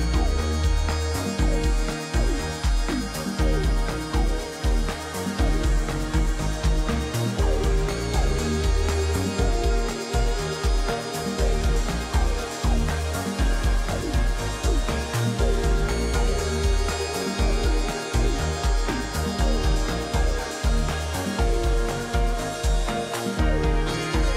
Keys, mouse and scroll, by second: 13.4 click.